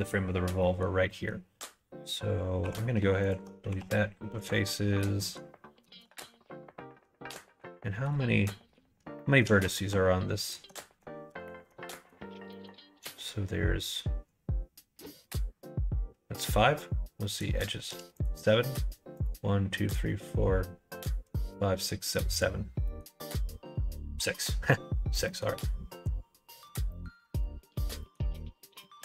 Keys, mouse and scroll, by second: 0.6 middle click, 1.1 middle click, 2.6 3, 3.2 alt+click, 3.6 x, 4.9 middle click, 5.9 shift+a, 7.3 right click, 8.1 right click, 9.1 shift+middle click, 10.4 alt+click, 10.9 1, 11.3 2, 11.4 alt+click, 11.9 middle click, 12.5 middle click, 18.1 click, 22.8 middle click, 25.2 middle click, 26.5 click, 26.9 middle click, 27.4 middle click, 28.0 middle click, 28.8-29.0 middle drag.